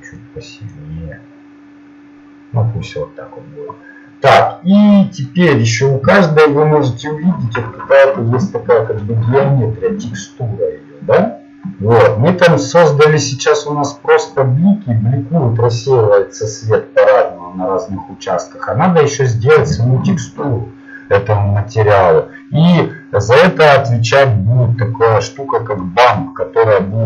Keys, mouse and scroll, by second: 3.1 click, 24.7-27.0 drag.